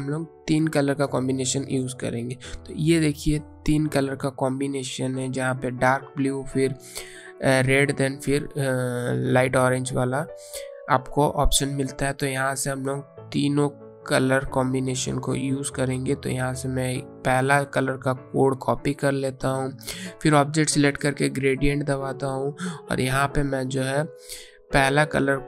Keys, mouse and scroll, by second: 2.9 click, 12.4 click, 17.3 click.